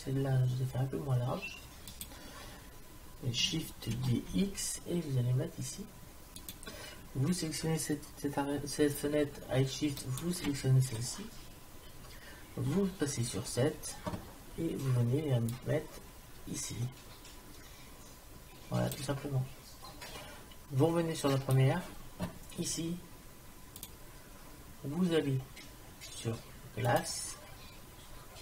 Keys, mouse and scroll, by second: 4.0 shift+d, 10.0-12.7 drag, 12.7 KP_7, 16.5 click.